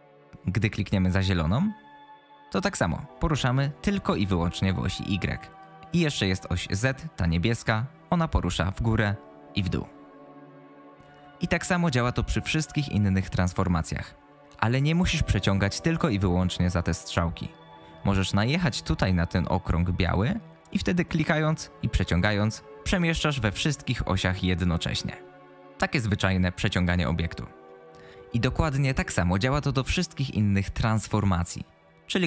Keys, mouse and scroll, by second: 1.3-5.6 drag, 7.7-11.2 drag, 21.0-26.9 drag.